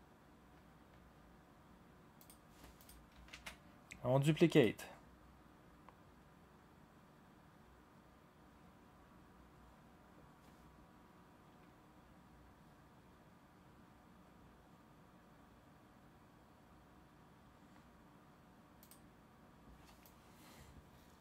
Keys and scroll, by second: 3.3 ctrl+d.